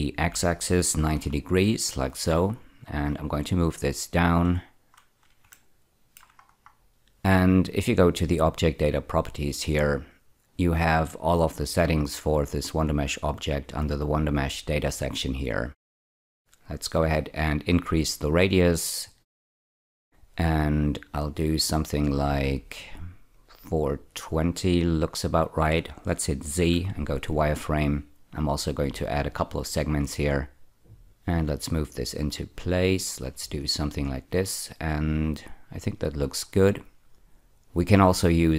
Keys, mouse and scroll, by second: 0.1 x, 0.9 9, 1.1 0, 1.8 click, 3.0 click, 5.4 shift+middle click, 6.4 scroll down 1, 10.7 click, 13.9 click, 16.8-20.5 drag, 23.3 click, 26.6 z, 27.3 click, 29.7 click, 31.0 click, 34.6 scroll up 2, 36.3-37.5 scroll down 3, 38.3-38.5 drag.